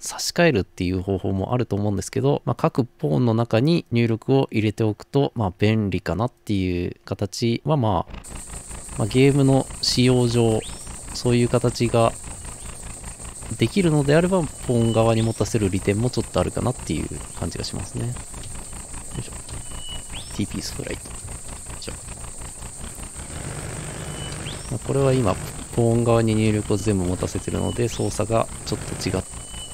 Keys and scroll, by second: 10.0-29.7 typing.